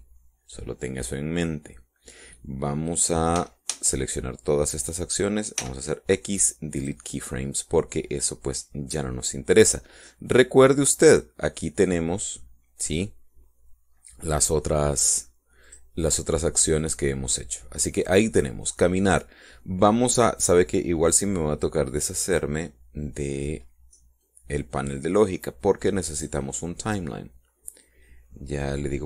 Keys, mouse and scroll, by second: 4.2 a, 6.4 x, 7.6 click, 11.9 click, 15.8 click, 16.5 click, 17.6 click, 25.1-26.2 drag, 27.0 click.